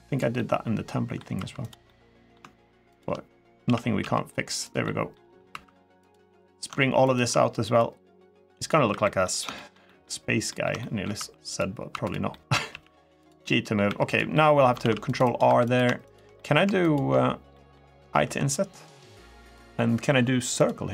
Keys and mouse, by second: 0.1 middle click, 1.1 2, 1.4 click, 1.6 middle click, 2.6 shift+click, 3.4 s, 3.8 x, 4.4 click, 4.6 middle click, 5.3 2, 5.8 click, 7.6 click, 8.7 3, 8.8 middle click, 9.3 shift+middle click, 9.6 middle click, 10.2 middle click, 10.5 middle click, 10.9 2, 11.3 click, 11.7 2, 12.1 click, 12.4 g, 12.9 click, 13.2 middle click, 13.6 3, 13.8 click, 14.1 middle click, 14.6 ctrl+r, 15.0 click, 15.2 3, 15.5 click, 16.1 middle click, 17.3 middle click, 18.0 i, 19.2 click, 20.4 click.